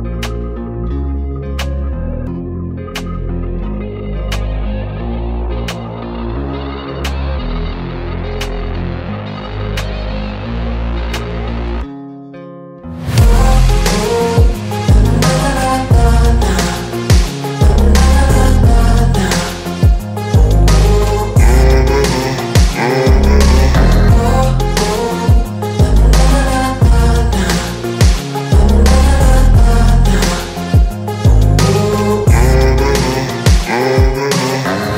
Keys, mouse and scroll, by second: 11.9 [, 29.9 right click.